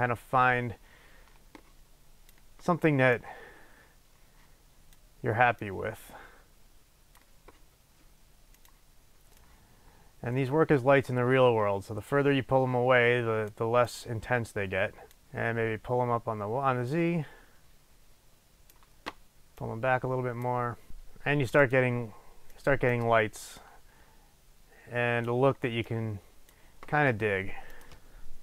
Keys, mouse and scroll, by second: 9.4-22.6 drag, 23.0 click, 23.5-28.4 drag.